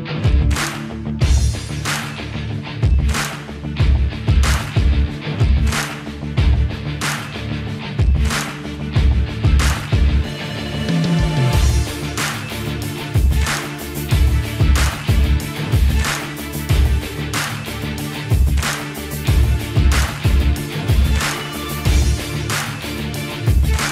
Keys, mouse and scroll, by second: 1.5 click, 3.8 click, 13.0 click, 17.3 click.